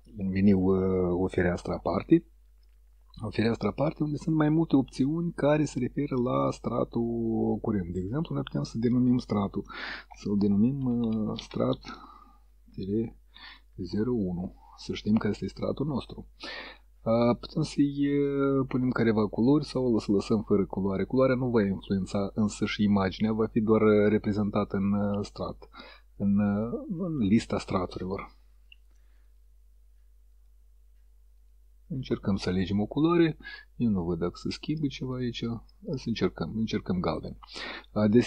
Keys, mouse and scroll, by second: 6.8 click, 10.2-13.9 typing, 24.7 click, 26.7 click, 28.6 click, 29.3 click, 30.4 click, 31.4 click, 33.3 click, 34.8 click, 35.8 click, 36.5 click.